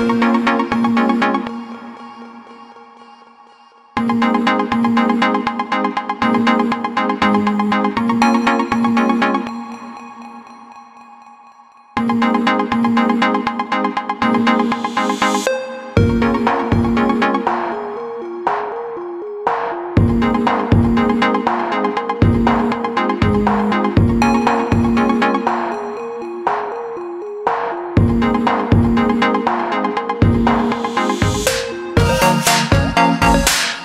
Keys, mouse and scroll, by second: 5.6 click, 8.5 alt+shift+click, 12.8 click, 14.9 click, 18.4 click, 28.1 click, 29.6 click, 31.1 click, 31.7 click, 32.9 click.